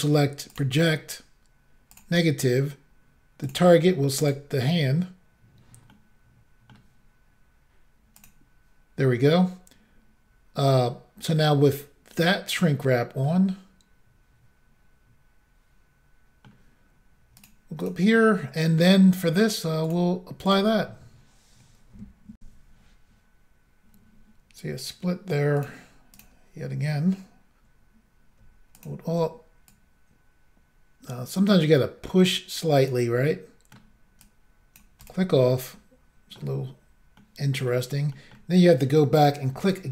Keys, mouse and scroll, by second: 0.5 click, 0.6 click, 1.9 click, 2.0 click, 3.4 click, 3.5 click, 4.2 click, 4.4 click, 5.9 middle click, 8.2 click, 8.2 click, 13.2 middle click, 16.6-17.4 scroll up 1, 17.4 click, 17.5 click, 17.8 click, 17.9 double click, 19.9 click, 20.5 click, 22.4 Insert, 25.5 click, 25.6 click, 26.1 click, 27.4 double click, 28.8 alt+click, 28.8 alt+click, 29.7 click, 33.2 middle click, 34.2 click, 35.1 click, 35.4 middle click, 37.2 middle click, 38.1 middle click, 39.6 alt+click, 39.7 alt+click.